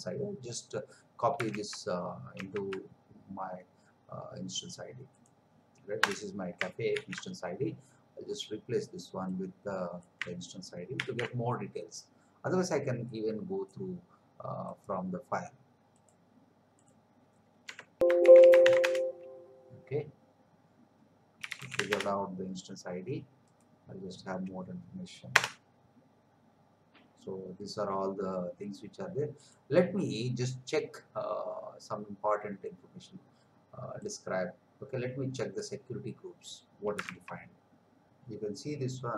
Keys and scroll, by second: 1.7 alt+Tab, 6.0 Return, 6.9 ctrl+v, 11.0 ctrl+v, 17.7 Escape, 18.0-19.1 typing, 21.4 c, 21.9 Return, 25.3 Return, 37.2 alt+Tab.